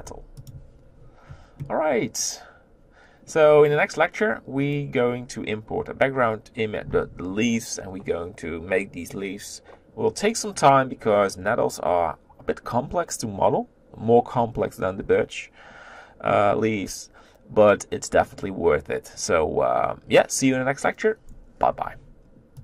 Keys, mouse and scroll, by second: 0.4 t.